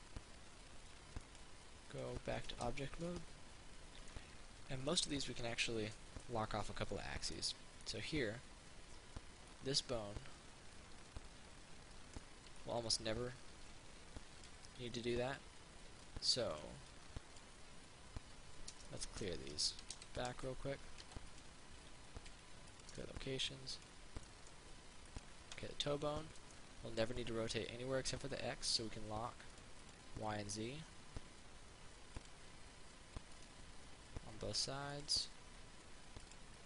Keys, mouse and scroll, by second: 3.3-4.4 right drag, 4.4-8.4 middle drag, 9.8-12.4 drag, 12.8 alt+click, 14.7 ctrl+z, 16.3 alt+click, 17.2 alt+click, 19.8 a, 20.0 a, 20.2 a, 20.5 a, 21.5 click, 22.6 alt+g, 23.0 click, 24.0 right click, 24.5 middle click, 25.3 right click, 26.8 middle click, 29.8 click, 33.6 right click, 34.9 click.